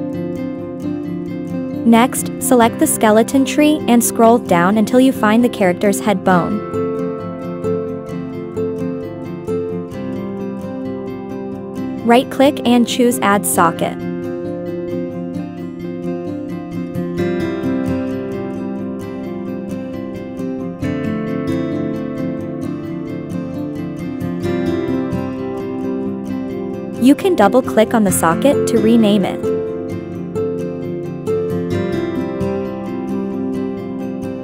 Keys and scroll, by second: 28.3-33.4 typing.